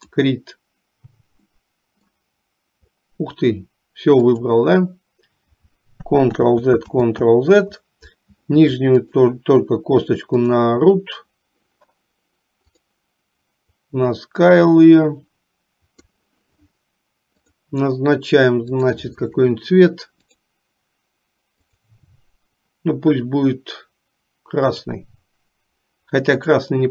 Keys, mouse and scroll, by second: 0.0 click, 1.6 middle click, 4.2 click, 9.0 click, 12.7 click, 13.8-16.3 drag, 18.9 click, 21.6-25.0 drag, 26.5-26.9 drag.